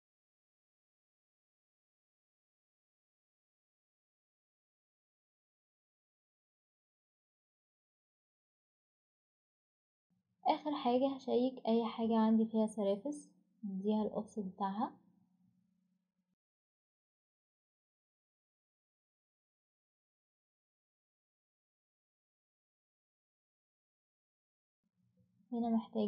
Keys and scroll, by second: 0.0-0.2 typing, 10.1 ctrl+z, 10.1 Delete, 15.9-16.8 typing, 21.3 Escape, 21.8-22.9 typing, 24.8 typing.